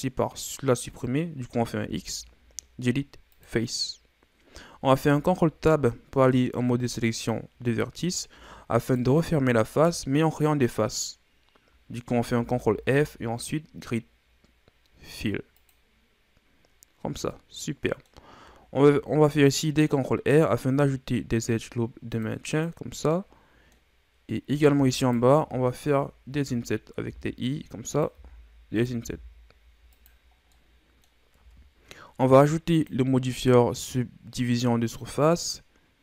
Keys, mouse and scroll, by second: 1.8 x, 4.9 ctrl+Tab, 8.8 alt+right click, 12.3 ctrl+f, 17.0 scroll down 1, 17.3-18.8 middle drag, 18.8 ctrl+r, 23.1-24.4 middle drag, 24.4 scroll up 2, 24.9 alt+right click, 27.1 typing, 28.1 i, 30.3 scroll down 1, 30.5 middle click, 31.3 Tab, 32.7-35.7 drag.